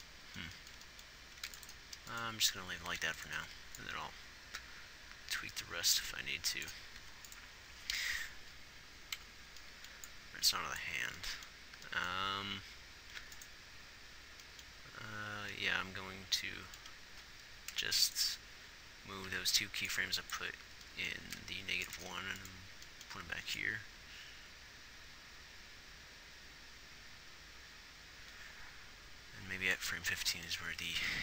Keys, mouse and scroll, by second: 2.6 ctrl+s, 3.0 a, 3.4 ctrl+s, 7.3 ctrl+s, 19.6 g, 22.0 ctrl+s.